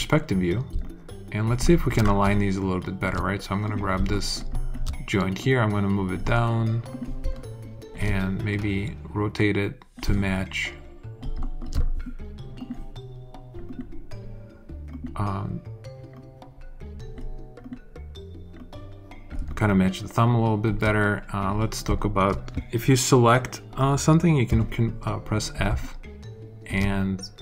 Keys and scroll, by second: 0.6 alt+space, 24.4 f.